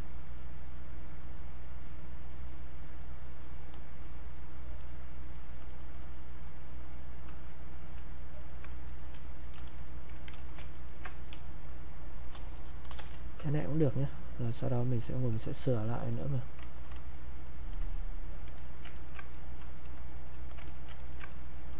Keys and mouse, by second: 3.7-6.9 drag, 6.9-8.4 drag, 9.6 q, 10.4 alt+click, 10.7 ctrl+right click, 11.3 ctrl+space, 11.7 ctrl+click, 11.9 ctrl+space, 12.8 ctrl+b, 12.9 ctrl+m, 13.6-18.5 shift+drag, 18.5 alt+click, 18.9 ctrl+right click, 19.4 click, 20.9 ctrl+alt+right click, 21.3-21.7 ctrl+drag.